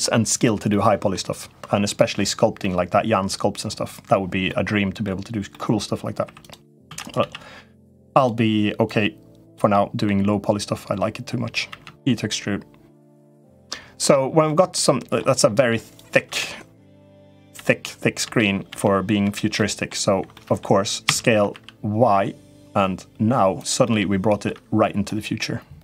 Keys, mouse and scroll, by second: 0.5 middle click, 2.4 middle click, 4.2 middle click, 5.2 middle click, 6.1 3, 6.1 click, 6.6 shift+d, 6.9 s, 8.6 click, 9.5 middle click, 10.3 click, 11.4 e, 13.0 middle click, 13.8 middle click, 14.6 middle click, 15.7 click, 16.0 l, 17.3 l, 18.0 l, 18.5 l, 19.0 l, 19.3 middle click, 20.2 middle click, 20.8 s, 23.6 middle click, 24.9-25.8 middle drag.